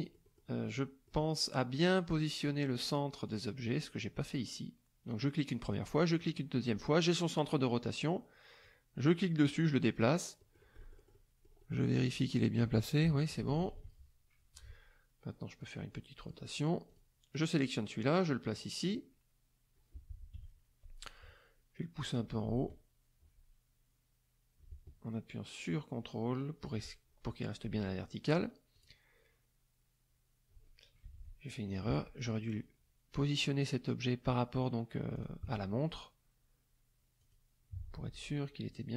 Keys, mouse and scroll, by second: 0.0 middle click, 0.6 middle click, 2.7 click, 4.2 click, 5.6 click, 6.2 middle click, 8.6-10.2 drag, 10.4 click, 13.0 KP_Subtract, 15.6 click, 16.9 click, 17.3-18.7 drag, 20.3 KP_Subtract, 22.0-26.8 drag, 27.8 click, 28.7 click, 31.0 KP_Subtract, 35.1 shift+click, 37.2 click, 38.7 click.